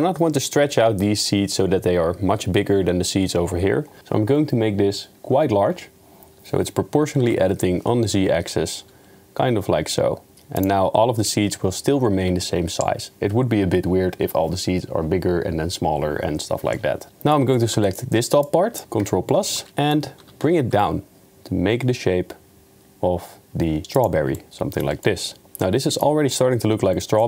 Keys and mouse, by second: 17.1 middle click, 17.9 shift+middle click, 18.6 click, 19.0 ctrl+KP_Add, 19.7 middle click, 20.2 g, 24.4 middle click, 25.2 middle drag, 25.4 Tab, 25.6-26.0 middle drag.